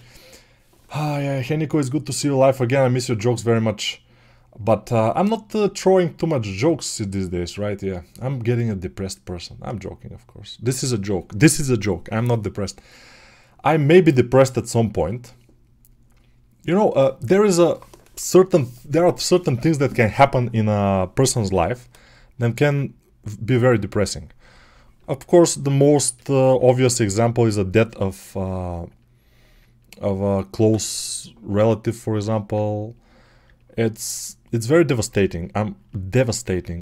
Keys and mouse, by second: 21.4 g, 25.0 alt+right click, 25.2-35.6 ctrl+alt+drag, 35.8-36.8 alt+drag.